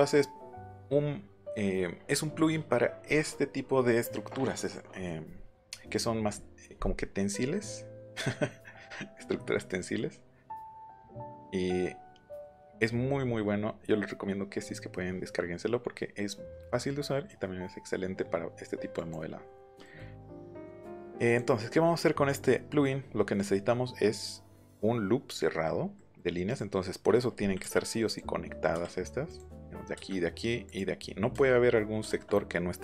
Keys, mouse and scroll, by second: 8.1 scroll down 1, 8.9-9.5 scroll up 1, 18.9 click, 19.6 scroll down 2, 19.8 middle click, 20.1 scroll up 2, 20.3 middle click, 20.9 click, 21.5 scroll up 2, 21.8 middle click, 23.2 middle click, 26.4 click, 28.0 click, 29.2 click, 30.6 click, 32.0 shift+middle click.